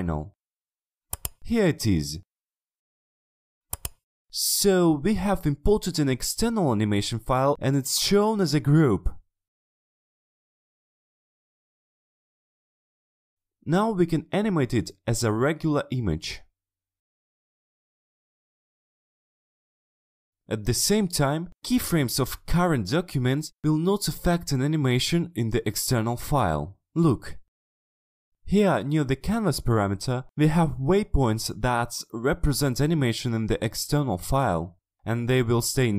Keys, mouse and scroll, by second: 1.1 click, 2.3 click, 3.1 click, 13.5-14.1 drag, 14.7 click, 15.3 click, 15.8 drag, 16.2 click, 17.1 click, 17.5 click, 17.9 click, 19.5 shift+click, 22.4-25.6 drag, 26.2-27.0 drag, 34.9-35.9 drag.